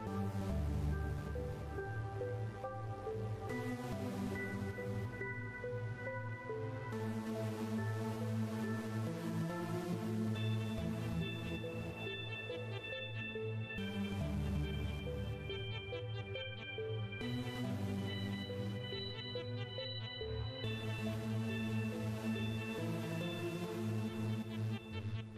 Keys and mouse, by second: 0.4 KP_7, 1.5 r, 3.0 KP_0, 3.9 KP_0, 5.9 click, 7.5 click, 9.4 a, 10.8 KP_Subtract, 12.5 click, 16.4 click, 17.6 click, 18.5-19.9 drag, 21.3 click, 22.7 click, 24.3 click, 24.9 right click.